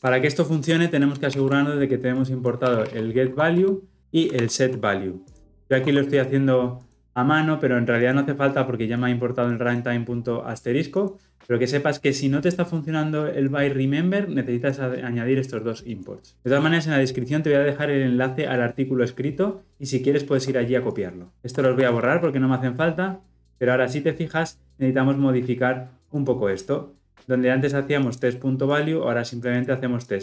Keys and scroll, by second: 1.2 ctrl+d, 4.2 ctrl+d.